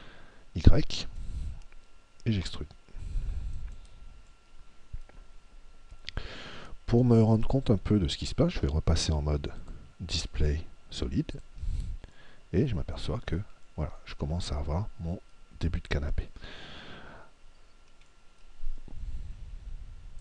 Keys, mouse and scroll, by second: 3.7 click, 4.3-7.6 middle drag, 9.5 click, 12.2-17.4 middle drag, 18.1-19.9 middle drag.